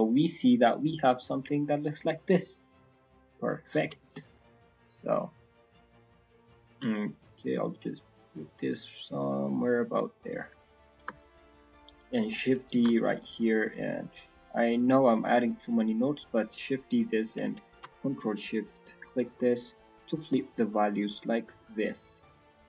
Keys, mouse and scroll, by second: 0.1-0.5 scroll down 3, 0.4 middle click, 0.8 scroll up 2, 1.1 middle click, 2.7 click, 6.9 shift+click, 11.1 scroll down 5, 11.4 middle click, 12.0 click, 12.7 shift+d, 14.2 middle click, 14.7 click, 15.4 click, 16.1 click, 17.6 ctrl+shift+click, 17.8 ctrl+shift+click, 18.3-19.2 scroll down 3, 18.7 middle click, 19.2-19.9 scroll up 5, 19.9 click, 21.1 click.